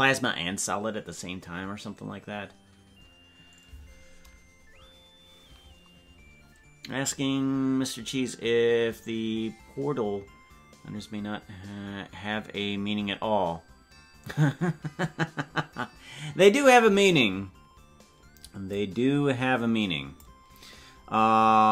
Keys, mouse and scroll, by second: 18.6-20.3 drag.